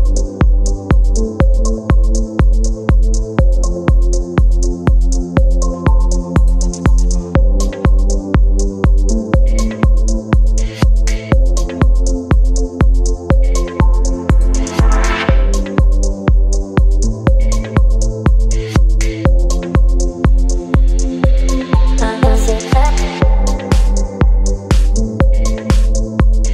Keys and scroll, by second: 0.1 ctrl+space, 0.8 ctrl+j, 1.6 ctrl+t, 9.9 Return.